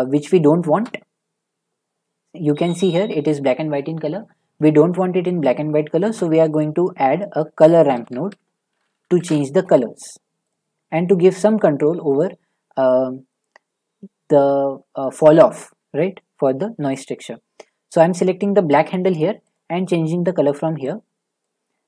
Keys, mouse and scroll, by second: 0.7 shift+middle click, 5.8 shift+middle click, 6.0-6.6 shift+scroll, 6.0 typing, 6.6 click, 7.4-8.1 typing, 9.2 Return, 10.5 click, 14.4-17.3 shift+scroll, 18.0 click, 19.5 click.